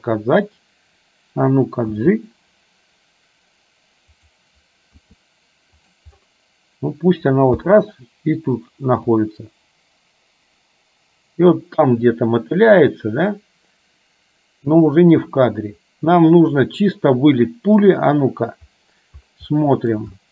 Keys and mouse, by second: 2.1 g, 5.1 r, 7.7 i, 9.4-18.1 drag, 19.6 middle click, 20.2 shift+middle click.